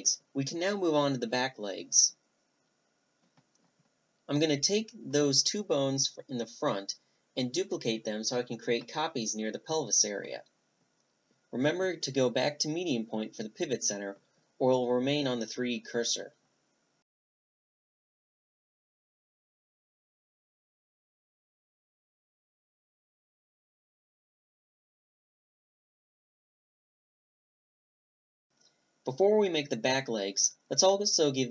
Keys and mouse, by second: 1.5-3.6 middle drag, 2.6 b, 4.6 b, 6.2-7.8 middle drag, 8.9 shift+d, 12.7 click, 12.9-14.2 middle drag, 15.1-16.1 drag, 16.8-17.9 middle drag, 17.9-19.3 drag, 19.3 s, 20.1 s, 24.8 a, 26.9 middle click, 27.0 click, 27.0-28.4 middle drag, 28.4 right click, 28.9 middle click, 28.9-31.0 right drag, 30.4 ctrl+p, 31.0 ctrl+p, 31.3-31.5 middle drag.